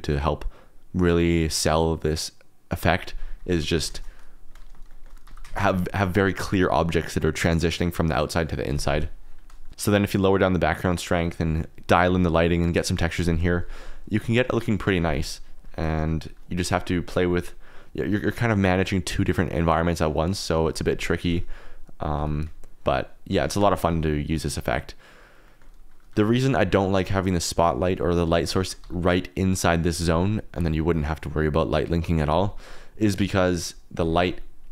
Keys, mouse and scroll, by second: 3.7 alt+d, 3.9 shift+z, 4.8 shift+click, 5.2 g, 5.4 shift+z, 5.8 click, 10.1 click, 15.4 click, 16.0 click, 16.6 g, 17.0 x, 18.1 Escape, 21.5 click, 22.1 g, 23.3 Escape, 25.4 click, 26.1 g, 28.2 alt+z, 28.6 shift+click, 28.8 g, 29.7 click, 33.2 click, 34.0 ctrl+z.